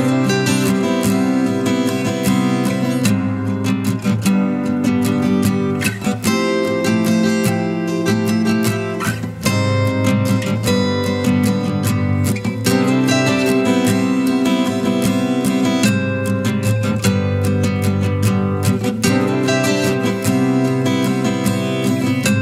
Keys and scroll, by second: 8.0 ctrl+t, 17.7 ctrl+t.